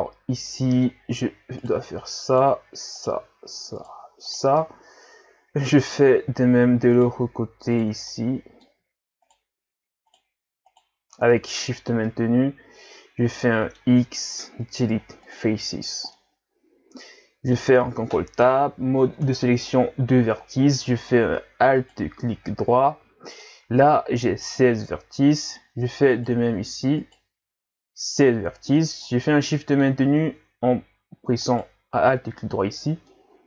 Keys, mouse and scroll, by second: 1.6 shift+right click, 2.3 shift+right click, 3.0 shift+right click, 3.8 shift+right click, 4.3 shift+right click, 4.6-6.9 middle drag, 6.9 shift+right click, 7.8 shift+right click, 8.1-9.3 middle drag, 9.3 shift+right click, 10.1 shift+right click, 10.7 shift+right click, 11.7 scroll down 2, 12.1-14.3 middle drag, 14.3 x, 16.2-18.0 middle drag, 18.0 ctrl+Tab, 20.8-21.8 middle drag, 21.8 alt+right click, 22.5-25.5 middle drag, 26.1 alt+right click, 27.0 alt+right click, 28.8-31.5 middle drag, 31.5 alt+shift+right click, 33.1-33.4 middle drag.